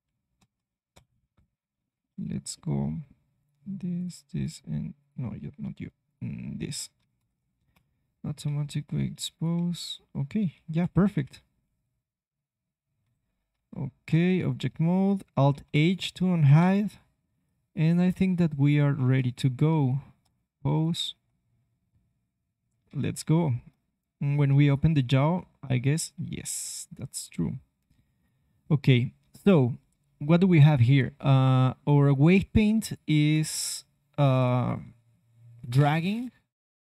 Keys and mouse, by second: 0.3 ctrl+p, 1.2 ctrl+p, 7.1 ctrl+p, 8.4 ctrl+Tab, 9.6 g, 11.1 KP_1, 11.6 g, 13.2 click, 13.5 ctrl+Tab, 14.3 click, 15.5 alt+h, 16.5 KP_3, 19.7 ctrl+Tab, 21.0 r, 23.4-24.9 middle drag, 24.9-26.6 drag, 25.3 r, 31.1 middle click, 32.2-35.1 drag.